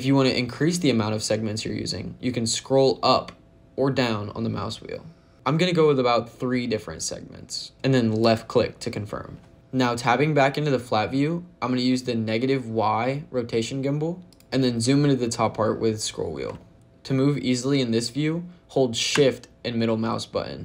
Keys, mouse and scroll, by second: 2.9-3.8 scroll up 1, 3.8-5.1 scroll down 1, 5.3-7.7 scroll up 2, 8.1 click, 14.1 click, 15.7 scroll up 3, 16.4 shift+middle click.